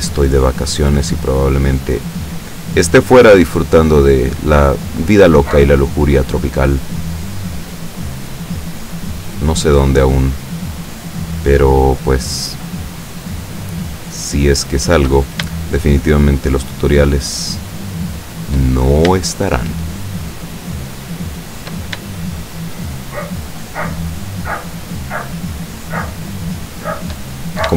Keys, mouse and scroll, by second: 0.6 shift+right click, 1.0 shift+right click, 1.3 shift+right click, 1.8 shift+right click, 2.2 shift+right click, 3.0 shift+right click, 3.7 shift+right click, 5.0 shift+right click, 5.4 shift+right click, 5.9 shift+right click, 6.2 shift+right click, 7.0 shift+right click, 7.4 shift+right click, 7.8 shift+right click, 8.2 shift+right click, 8.9 shift+right click, 9.4 shift+right click, 10.0 shift+right click, 10.7 shift+right click, 11.1 shift+right click, 12.1 shift+right click, 12.9 shift+right click, 13.3 shift+right click, 13.6 shift+right click, 14.1 shift+right click, 14.7 shift+right click, 15.6 shift+right click, 16.5 shift+right click, 16.9 shift+right click, 17.7 shift+right click, 18.1 shift+right click, 20.3 shift+right click, 21.1 shift+right click, 21.4 shift+right click, 22.5 shift+right click, 22.9 shift+right click, 23.4 shift+right click, 24.1 shift+right click, 24.6 shift+right click, 25.1 shift+right click, 25.9 right click, 26.3 right click, 26.7 right click, 27.4-27.7 scroll up 1.